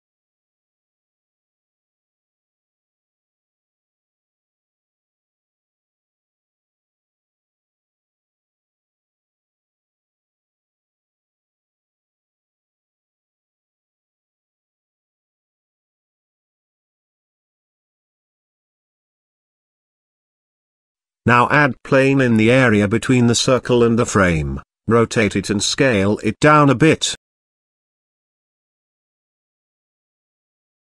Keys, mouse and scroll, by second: 4.7 KP_Decimal, 5.2 middle click, 6.3 s, 8.9-9.9 scroll up 2, 10.4 shift+middle drag, 11.0-11.8 middle drag, 12.1 shift+middle click, 13.1-13.6 scroll up 2, 16.5 scroll up 1, 16.7 middle click, 17.4-18.5 scroll up 1, 18.5-19.3 scroll up 1, 21.2 shift+a, 23.5 t, 24.1 t, 24.4 r, 26.4 s, 29.9 g.